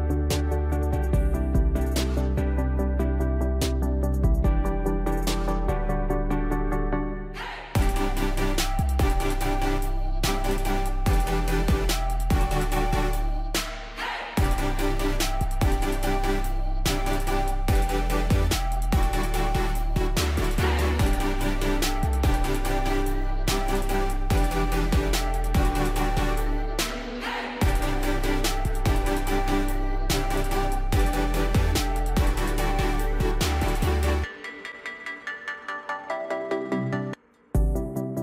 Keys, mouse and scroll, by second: 27.4 right click, 28.6 click, 35.3 ctrl+click, 38.0 scroll up 1.